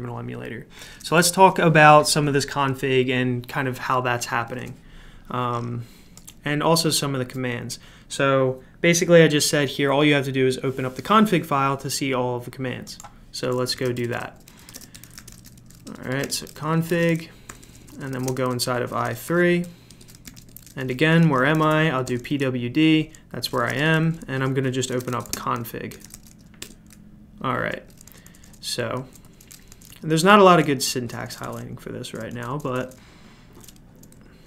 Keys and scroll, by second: 13.5-22.0 typing, 15.8 Return, 23.3-26.6 typing, 28.0-34.4 typing.